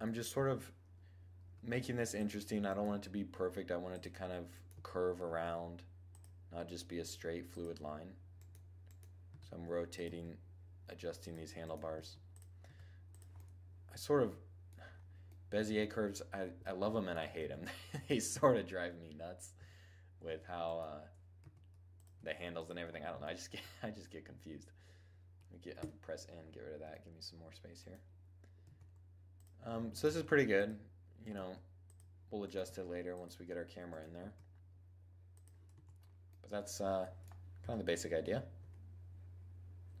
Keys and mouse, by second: 0.9 r, 1.7 click, 2.0 middle click, 2.3 g, 3.6 click, 4.1 g, 5.1 right click, 5.9 click, 6.3 g, 8.7 r, 8.9 right click, 9.0 click, 9.5 g, 10.7-14.6 drag, 11.4-12.7 right drag, 11.4 g, 12.1 r, 12.7 middle click, 15.6 click, 16.1 middle click, 16.8 Tab, 17.4 2, 19.0 1, 19.7 Tab, 20.1 click, 20.8 g, 21.6 r, 22.3-25.2 drag, 25.2 n, 26.4-28.3 drag, 28.1 g, 28.3 right click, 28.8 middle click, 29.1 click, 29.4 middle click, 29.4 g, 29.8-32.1 drag, 29.8-35.4 right drag, 30.8 g, 32.1 g, 33.6 click, 33.6 g, 35.1 Tab, 35.4-36.5 drag, 37.0 2, 38.0 1, 39.5-40.0 middle drag.